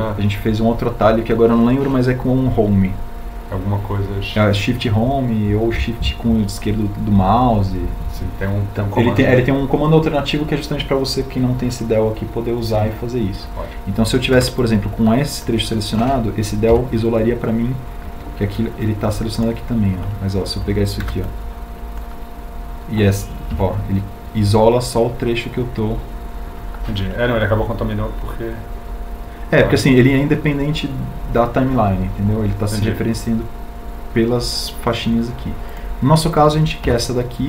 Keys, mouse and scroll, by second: 15.3 b, 22.3 b.